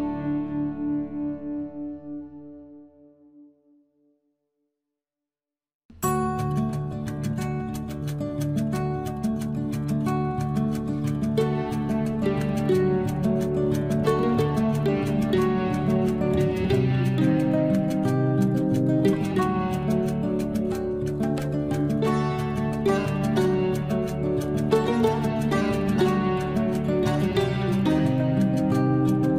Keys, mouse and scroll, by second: 0.0-1.7 typing, 2.3 Return, 3.8 click, 5.3 typing, 5.5 Return, 6.6 l, 7.0 scroll up 1, 11.3 click, 12.5 scroll up 1, 12.5 space, 13.5 l, 14.2 click, 16.1 space, 16.2 scroll down 1, 16.9 click, 18.0 Delete, 18.2 scroll down 1, 18.8 click, 19.2 Delete, 19.5 scroll down 1, 19.9 scroll up 1, 26.2 scroll up 1, 27.4-29.2 scroll down 1.